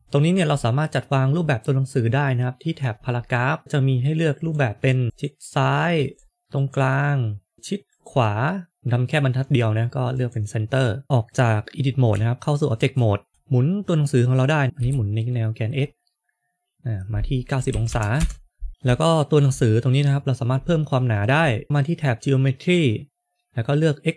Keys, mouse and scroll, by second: 0.0-1.8 scroll down 4, 3.6-4.3 scroll down 1, 4.3 click, 5.9 click, 7.5 click, 12.0 Tab, 13.3 r, 18.7 scroll down 2, 19.0 shift+middle click, 20.5 scroll up 1, 21.3-21.6 scroll up 1, 21.6 click.